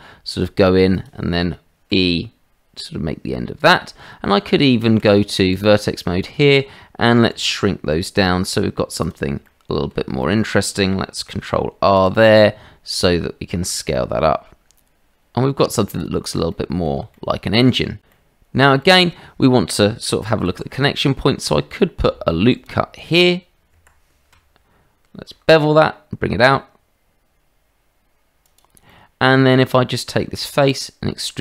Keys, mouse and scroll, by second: 1.9 e, 4.4 Tab, 5.5 click, 7.3 s, 9.4 click, 10.2 shift+middle click, 11.2 ctrl+r, 13.7 s, 16.5 click, 17.1 shift+middle click, 18.1 middle click, 18.8 shift+middle click, 19.4 middle click, 20.5 ctrl+r, 20.7 scroll up 1, 25.3 ctrl+b, 28.8 middle click, 29.5 Tab, 30.7 click.